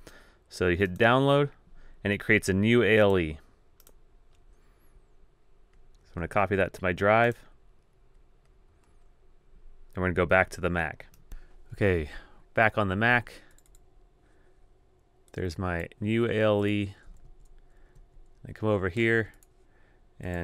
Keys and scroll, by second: 17.0 super+w, 18.3 super+Tab.